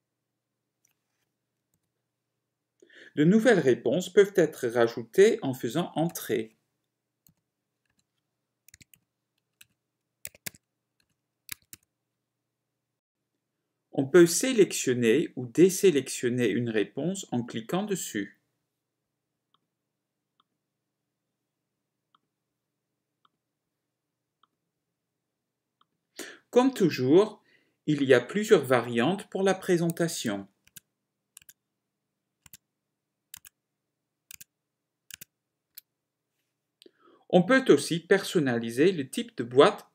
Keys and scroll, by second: 0.3 alt+c, 6.3 Return, 9.2 0, 10.5-12.5 typing, 11.2 Return, 30.7 ctrl+Tab, 33.5 ctrl+Tab.